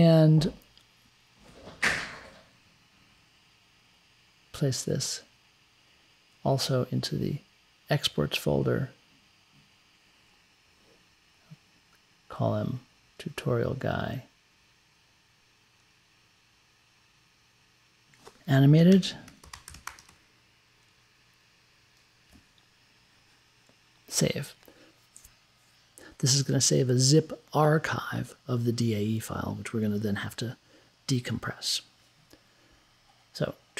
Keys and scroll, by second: 18.9-21.3 typing.